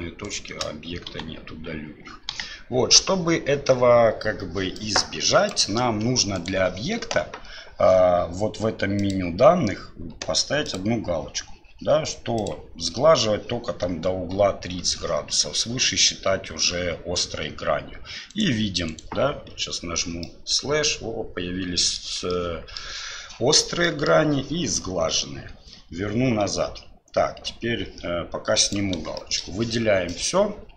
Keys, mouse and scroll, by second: 0.2 shift+right click, 1.1 Delete, 2.3 KP_1, 4.8-5.5 drag, 6.4 right click, 9.0 click, 10.7 click, 12.4 click, 18.3 right click, 18.9 right click, 19.5 KP_Divide, 20.2-21.9 middle drag, 22.3 middle click, 23.8 middle click, 25.1 KP_Divide, 26.5 KP_Divide, 27.3 ctrl+z, 28.6 click, 29.1 shift+middle click, 30.2 click.